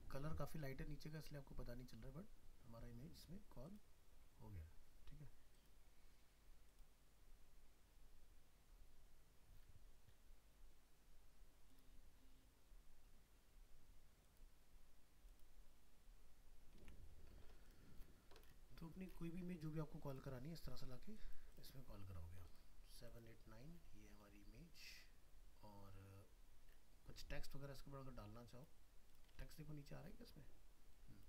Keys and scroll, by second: 16.8 alt+Tab, 29.4 alt+Tab.